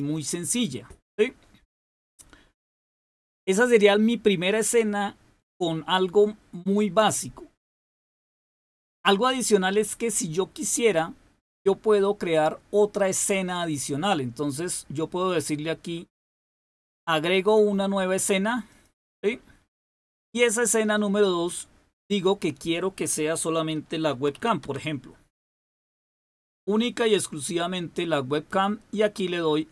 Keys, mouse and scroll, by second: 13.7 click, 18.6 click, 20.9-22.0 drag, 23.8-26.3 typing.